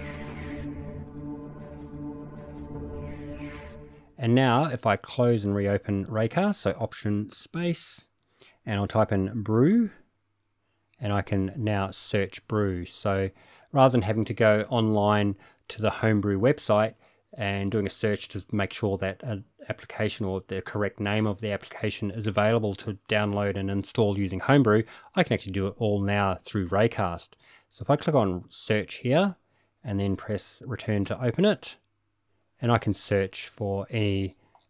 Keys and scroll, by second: 7.3 alt+space, 9.3-10.3 typing, 31.0 Return, 33.4 typing.